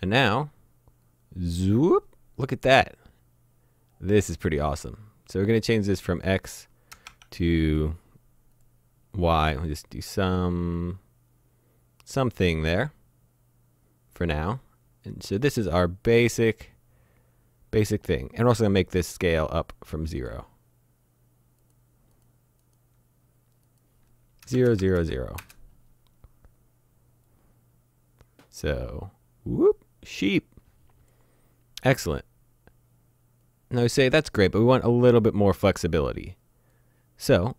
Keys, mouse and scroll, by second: 1.1 click, 6.9 KP_0, 7.1 Tab, 8.6 click, 20.2 click, 24.4 KP_0, 24.5 Tab, 24.7 KP_0, 24.8 Tab, 25.0 KP_0, 25.4 KP_Enter, 27.3 click, 33.5 click.